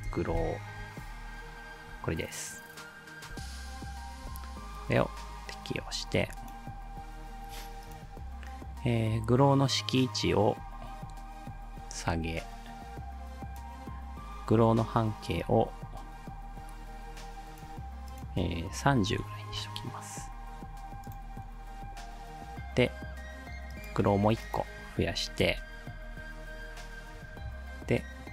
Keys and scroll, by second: 0.0-0.4 typing, 4.0 ctrl+alt+Return, 18.7-19.5 typing, 19.5 Return, 25.4 ctrl+d.